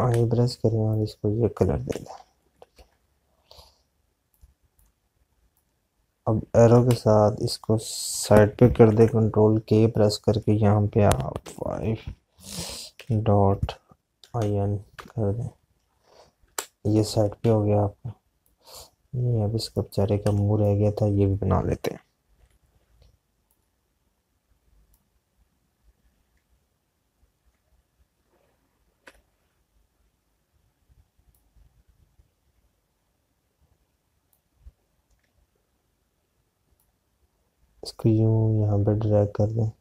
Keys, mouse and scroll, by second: 7.6 Left, 16.3 Return, 17.1 Left, 25.6 click.